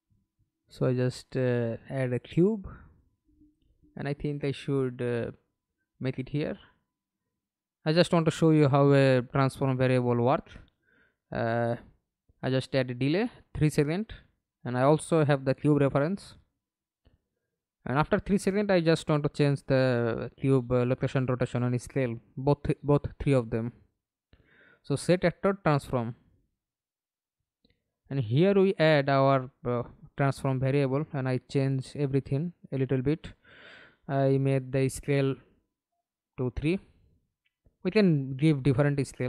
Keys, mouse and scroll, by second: 0.2 f, 0.6-1.1 scroll down 5, 1.2 alt+click, 6.1 right click, 6.6 right click, 8.3-9.0 scroll up 2, 9.6 right click, 10.6 d, 14.1 3, 14.5 Return, 16.7 right click, 17.8 right click, 19.6-25.8 typing, 26.0 Return, 27.7 right click, 33.3 3, 33.7 Return, 35.7 3, 36.1 Return, 37.9 Return, 38.3 3.